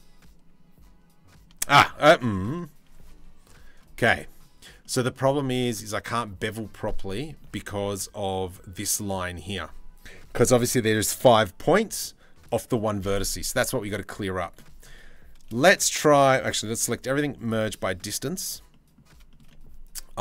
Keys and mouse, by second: 1.1 ctrl+z, 4.4 click, 6.7 shift+middle click, 13.9 middle click, 14.6 3, 15.9 a, 16.5 m, 17.4 click, 18.4 middle click, 18.8-20.0 shift+middle drag, 20.0 click.